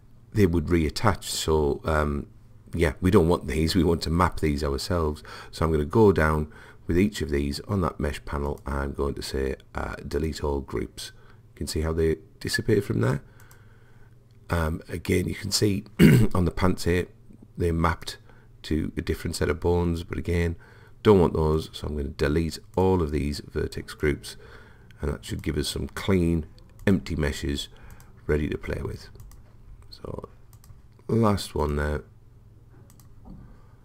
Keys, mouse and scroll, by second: 8.5 click, 13.5 click, 17.0 click, 20.4 click, 22.8-27.3 drag, 27.9-31.1 drag, 31.7-33.8 drag.